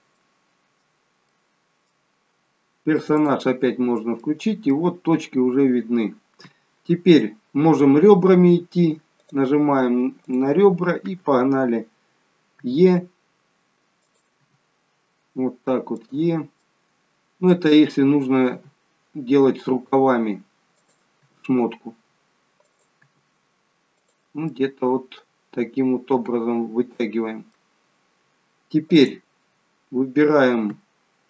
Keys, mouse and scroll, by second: 0.2 middle click, 1.4 middle click, 3.3 click, 4.0 scroll down 1, 4.2 middle click, 9.3 click, 10.3 click, 12.7 e, 16.6 middle click, 18.6 e, 24.7 middle click, 29.0 click.